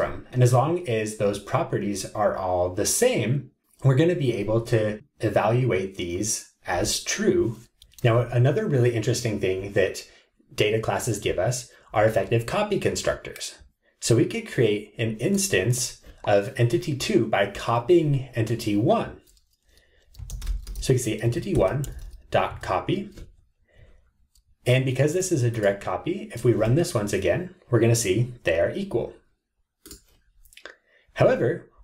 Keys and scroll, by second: 21.3 Tab.